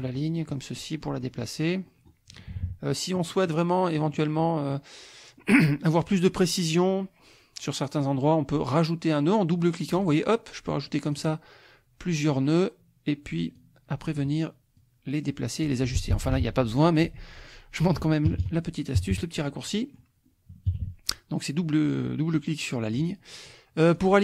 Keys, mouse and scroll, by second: 0.8 click, 2.5 KP_Subtract, 3.2 click, 3.9 click, 9.9 click, 11.0 click, 12.1 click, 13.5 click, 14.8-15.8 drag, 16.4 ctrl+z, 18.3 ctrl+KP_Subtract, 19.8 click, 20.7 KP_Subtract, 23.9-24.2 drag.